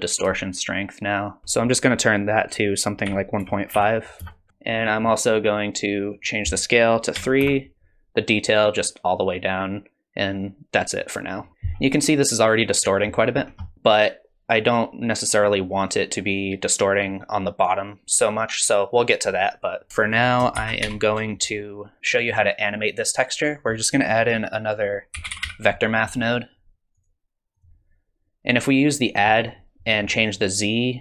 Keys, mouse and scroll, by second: 0.4 shift+click, 1.4 BackSpace, 4.5 middle click, 4.9 middle click, 6.1 click, 8.4 click, 11.5-12.6 scroll down 1, 12.6 middle click, 12.6 scroll down 1, 12.8 middle click, 13.4-13.7 scroll down 3, 13.6 middle click, 13.7 click, 19.9 middle click, 19.9 scroll up 2, 20.0 click, 20.6 shift+a, 29.1 click.